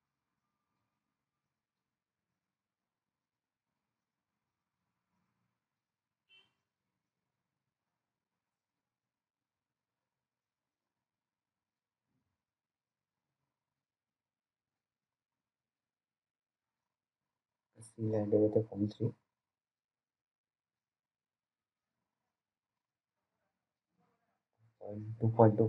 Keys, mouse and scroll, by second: 2.6-3.9 scroll down 1, 3.9-4.8 scroll up 1, 4.8 click, 8.1 BackSpace, 11.7 click, 16.6 1, 17.5 click, 22.7 click, 22.7 click.